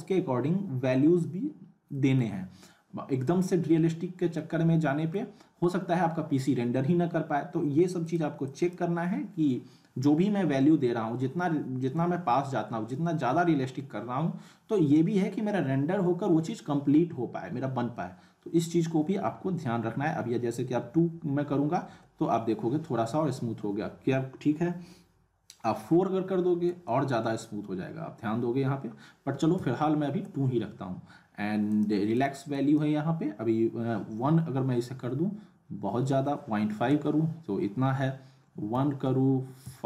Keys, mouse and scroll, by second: 1.3-1.6 scroll up 1, 1.9 middle click, 2.5-3.2 scroll up 1, 4.3-5.3 middle drag, 8.0 click, 31.7 click.